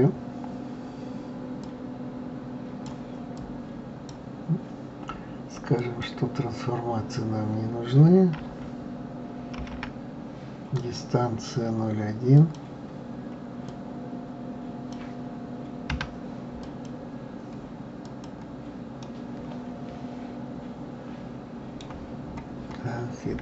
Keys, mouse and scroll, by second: 1.6-3.4 drag, 5.8 click, 9.6 alt+m, 12.4-15.4 drag, 18.0 click, 19.0-22.0 middle drag, 22.2-23.4 scroll up 4.